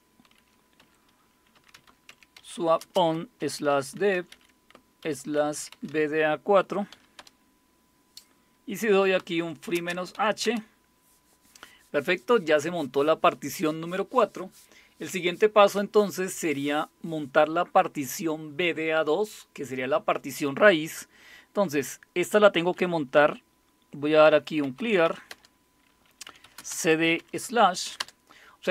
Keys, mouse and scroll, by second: 0.8-7.2 typing, 8.8-10.4 typing, 24.0-28.5 typing.